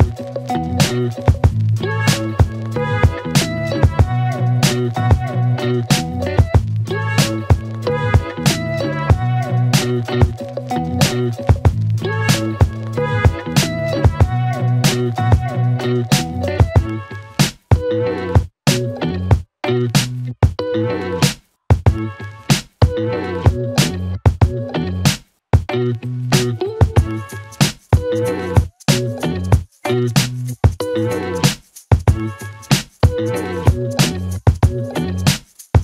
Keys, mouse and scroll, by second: 5.0 alt+Num_Lock, 6.1 click, 8.3-10.3 typing, 11.0 Return, 11.9-13.1 typing, 13.4 Return, 16.8 click, 18.8 click, 20.7-24.9 click, 25.1-25.8 scroll up 1, 26.6-28.9 click, 30.0 scroll down 1, 33.0 click, 35.1 click.